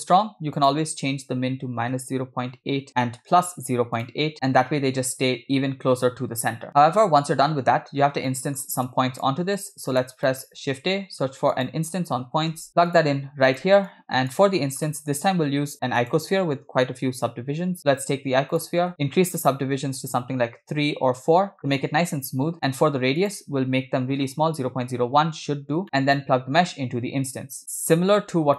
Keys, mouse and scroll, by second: 0.6-2.9 drag, 4.0 click, 6.7-7.9 middle drag, 6.7 scroll down 2, 8.2 scroll down 2, 8.3 middle click, 8.9-9.3 drag, 9.6-10.1 drag, 10.3 middle click, 10.7 shift+a, 13.9 click, 14.9 middle click, 15.5 shift+a, 18.9 scroll up 2, 19.4-20.9 drag, 21.6 click, 22.7 click, 23.2-25.0 drag, 25.9 middle click, 26.2-27.6 drag, 28.2 middle click.